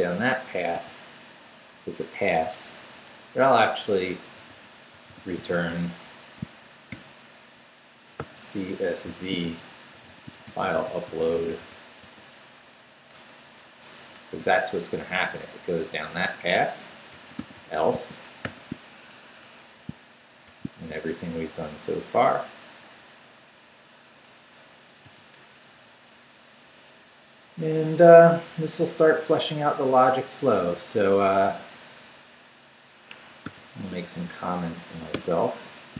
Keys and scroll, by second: 0.7 p, 3.0 BackSpace, 4.1-6.9 typing, 7.9-12.1 typing, 13.5 BackSpace, 14.1 shift+BackSpace, 14.4 shift+', 16.1 Return, 16.9-18.4 typing, 19.0 shift+Down, 19.4 Escape, 20.4 shift+v, 21.0 shift+Down, 23.0 Down, 25.0 shift+., 25.8 shift+Down, 31.2 Up, 31.8 Up, 33.1 Escape, 33.4 o, 33.8 Tab, 34.8 shift+Tab, 35.1 shift+3.